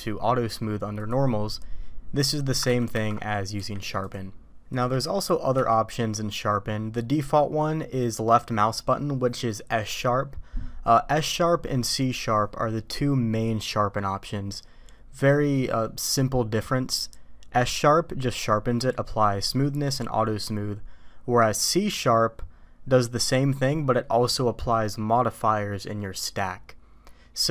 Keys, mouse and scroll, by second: 1.0 click, 2.7 ctrl+z, 2.9 ctrl+z, 3.5 q, 5.6 q.